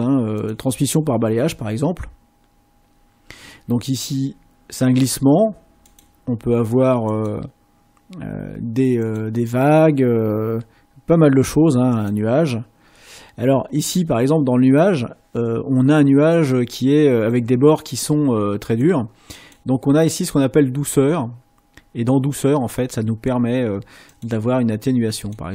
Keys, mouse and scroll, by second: 7.1 click, 9.0 click, 11.9 click, 18.8 click, 20.3-23.4 drag, 24.1 click, 25.2 click.